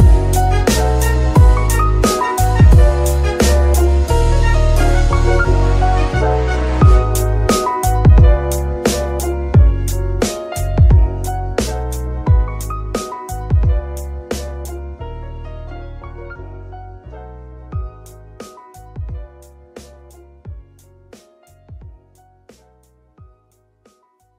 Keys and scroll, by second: 14.0 shift+Tab, 14.6 shift+s, 15.9 Tab, 16.5 g, 17.4 Escape, 21.7 g, 22.3 shift+s, 23.3 KP_3.